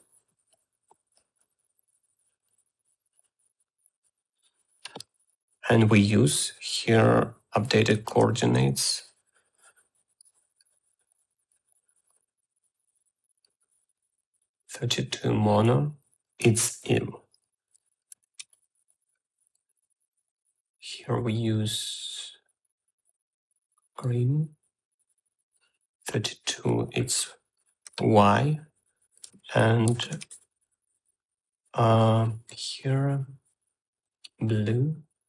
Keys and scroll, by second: 8.7-9.6 typing, 10.7 o, 17.4 shift+x, 18.9-19.8 typing, 28.8 shift+y, 30.3 ctrl+c, 30.7-31.7 typing.